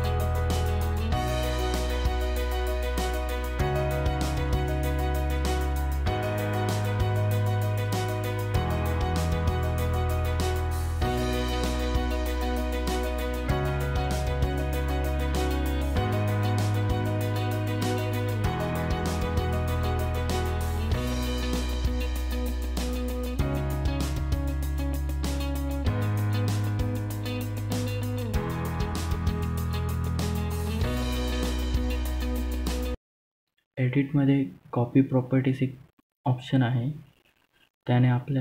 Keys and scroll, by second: 6.5 ctrl+z, 13.3 F11, 13.9 Return.